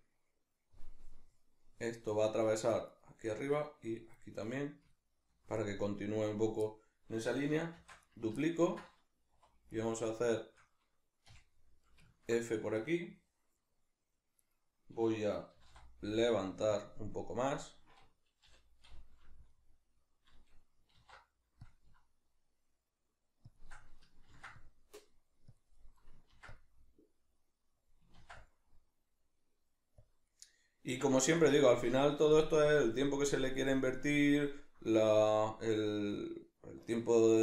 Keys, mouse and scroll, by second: 2.9 shift+right click, 3.5 shift+right click, 4.2-8.1 middle drag, 7.8 shift+d, 8.1-9.3 right drag, 9.3 middle click, 9.3 2, 9.7 right click, 10.3 shift+right click, 11.3 f, 12.1-14.4 ctrl+middle drag, 14.4 right click, 15.5 g, 16.8 click, 18.5 l, 19.5-23.6 middle drag, 20.9 alt+e, 23.6 shift+click, 23.7-25.6 middle drag, 24.3 ctrl+r, 25.6 click, 25.7-27.9 middle drag, 26.3 ctrl+r, 27.9 click, 28.1 ctrl+r, 30.1 click, 30.3-37.4 middle drag, 31.3 Tab.